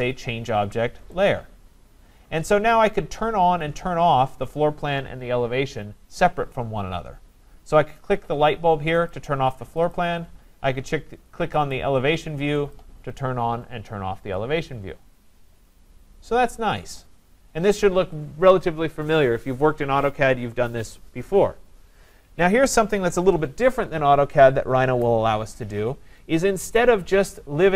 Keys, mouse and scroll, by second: 1.3 click, 1.3 click, 9.1 click, 9.9 click, 11.7 click, 12.7 click.